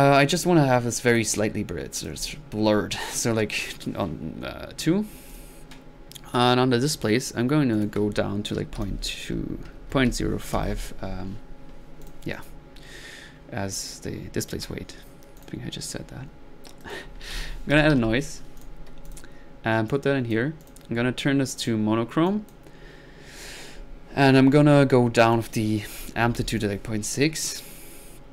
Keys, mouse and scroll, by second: 1.1 click, 1.9 click, 2.5-3.2 drag, 3.5 click, 5.3 click, 7.7 click, 12.0 drag, 12.4 drag, 16.8 middle click, 17.1-18.4 typing, 18.6 click, 19.1 click, 19.5-20.4 drag, 20.6 drag, 21.6 click, 22.3 click, 25.2 drag.